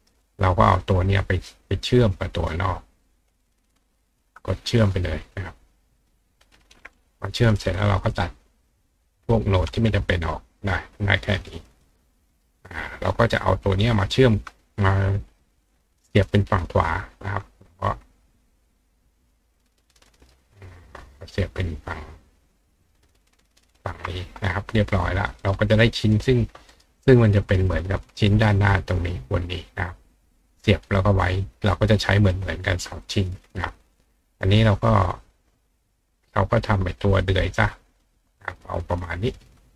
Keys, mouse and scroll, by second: 0.0 click, 0.8 click, 1.9-3.5 drag, 4.1 shift+click, 6.0 click, 7.6 click, 8.4-9.3 drag, 11.6 click, 11.8 right click, 12.3 right click, 13.7 click, 15.3 click, 16.1-17.3 ctrl+drag, 18.7-20.3 ctrl+drag, 20.1-21.8 ctrl+right drag, 21.2 ctrl+click, 22.2 ctrl+click, 23.8-24.1 ctrl+drag, 24.2 click, 25.2 right click, 26.1 right click, 26.7 right click, 27.8 click, 30.9 right click, 32.0 click, 33.1 click, 35.0 click, 36.1 click, 37.0 click, 37.6 click.